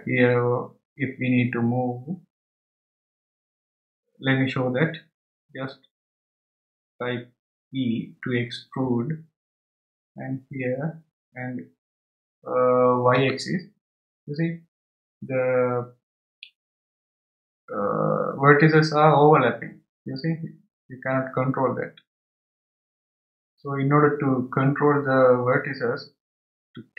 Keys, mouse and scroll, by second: 9.8 e.